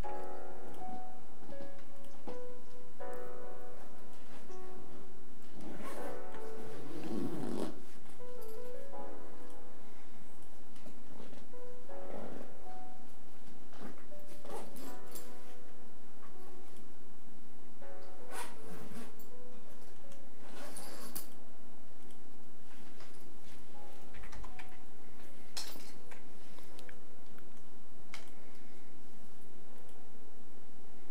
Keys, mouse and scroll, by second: 18.3 click, 28.3 click.